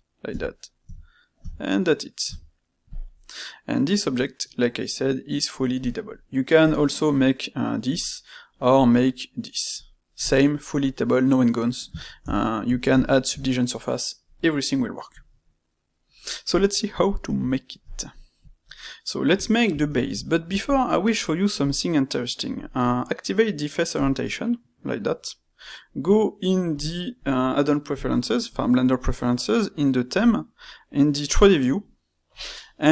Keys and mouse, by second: 3.1-6.1 middle drag, 6.6 click, 7.1 click, 7.8 click, 9.7 click, 12.1-16.0 ctrl+shift+middle drag, 16.6-18.4 middle drag, 18.9-21.6 middle drag, 21.6-24.6 drag.